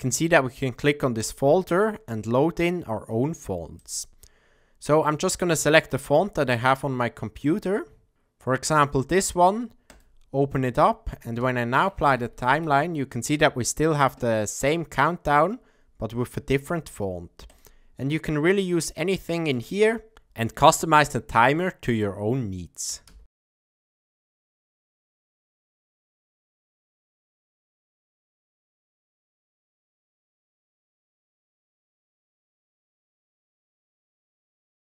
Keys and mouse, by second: 1.2 click, 11.2 space, 12.4 shift+Left, 14.6-16.5 middle drag, 16.5 space, 17.4 click, 23.2 space, 23.8 click, 25.3 shift+Left, 26.3 space, 26.9 space, 27.1 drag, 28.6 shift+Left, 29.5 drag, 31.8 middle click, 32.1 shift+Left, 33.2 space, 34.1 space.